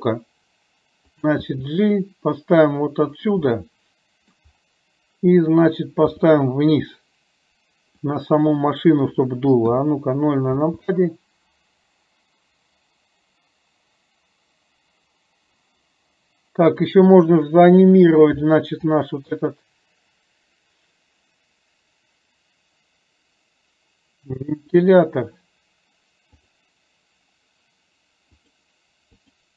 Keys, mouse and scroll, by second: 1.5 g, 3.6-4.5 middle drag, 6.2 r, 9.7 KP_0, 10.6 space, 16.7 click, 19.1 r, 26.5 drag, 28.5 click, 29.2 click.